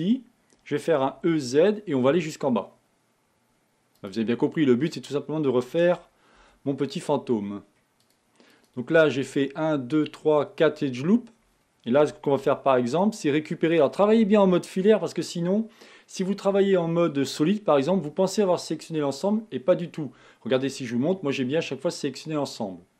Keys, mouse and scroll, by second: 20.8-22.9 middle drag.